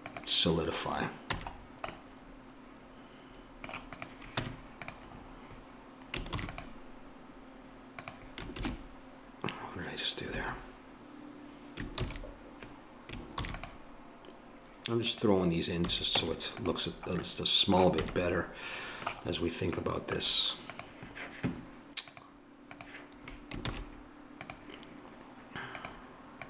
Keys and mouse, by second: 1.3 a, 4.3 Tab, 6.3 ctrl+r, 8.6 ctrl+shift+r, 12.0 ctrl+z, 13.4 ctrl+r, 15.8 a, 16.2 Tab, 18.0 a, 20.7-23.6 drag, 23.6 shift+s.